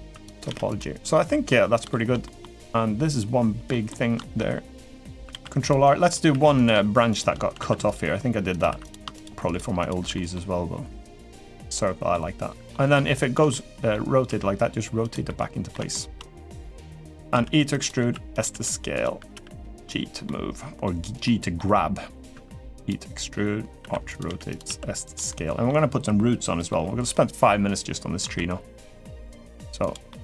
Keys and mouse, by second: 0.2 g, 0.9 middle click, 1.7 shift+middle click, 2.0 middle click, 3.4 middle click, 4.7 middle click, 5.1 ctrl+r, 6.1 3, 6.3 click, 7.5 ctrl+r, 8.4 3, 8.6 click, 8.9 shift+click, 9.3 shift+click, 9.9 middle click, 11.4 click, 11.9 middle click, 12.8 shift+middle click, 13.3 middle click, 14.0 r, 15.0 middle click, 15.7 shift+middle click, 16.7 middle click, 17.5 e, 17.7 s, 18.3 r, 19.1 g, 20.0 middle click, 21.0 middle click, 22.1 e, 23.5 r, 24.0 g, 24.4 s, 25.0 middle click, 26.4 middle click, 28.0 i, 29.9 middle click.